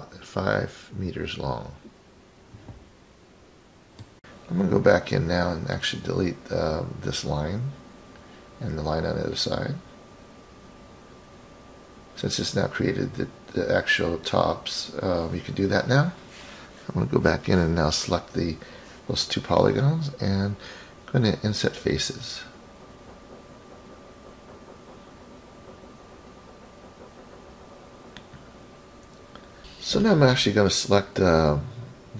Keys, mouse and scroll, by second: 3.4 click, 4.2 middle click, 4.4 click, 5.1-5.8 scroll up 4, 6.6 click, 10.1 click, 10.9 click, 12.2 middle click, 14.0 shift+click, 15.1 Delete, 19.5 click, 20.3 click, 20.8 middle click, 22.6 shift+click, 24.3 click, 25.4-27.7 drag, 28.2-29.9 middle drag, 31.0 click.